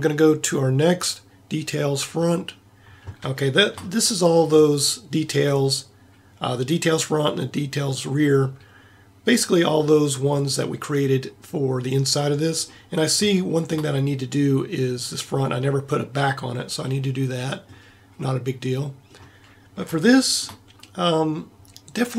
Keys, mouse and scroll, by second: 3.6-6.4 middle drag, 10.3-12.4 middle drag, 13.1 middle click, 17.0-18.2 middle drag.